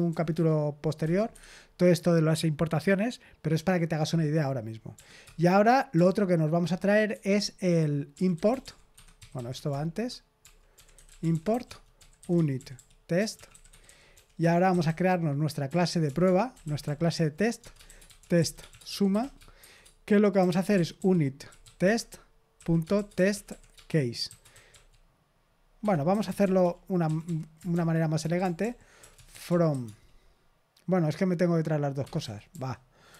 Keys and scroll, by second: 0.0-1.0 typing, 1.2 Escape, 4.9 o, 5.2 Return, 7.0 Escape, 7.8-30.2 typing, 14.3 Return, 25.7 Escape, 32.0 Escape, 32.1-33.1 typing.